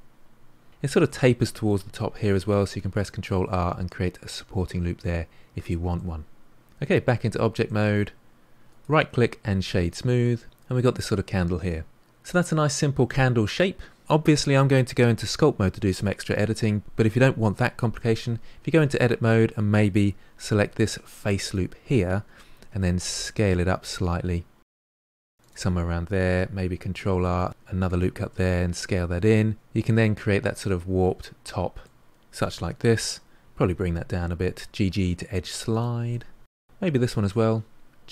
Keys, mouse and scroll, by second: 2.5 ctrl+r, 6.0 middle click, 6.8 Tab, 7.2-7.6 scroll down 3, 7.6-8.6 middle drag, 8.6-10.0 right drag, 10.0-13.1 middle drag, 18.0 Tab, 19.8 3, 20.7 alt+click, 21.7 s, 26.6 ctrl+r, 28.4 s, 29.8 Tab, 30.2-30.6 scroll down 1, 30.6-32.5 middle drag, 32.5 Tab, 33.5 g, 36.1 middle click, 37.1 alt+click, 37.7 g.